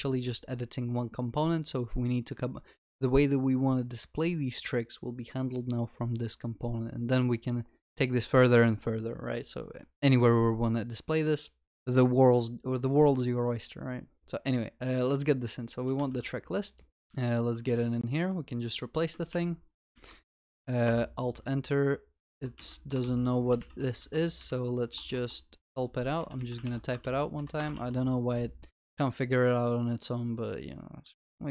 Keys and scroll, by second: 16.1 ctrl+c, 19.3 ctrl+v, 19.9 ctrl+y, 19.9 ctrl+s, 20.8 alt+Return, 25.9 Escape, 26.6 Escape, 27.0 ctrl+y, 27.1 ctrl+s.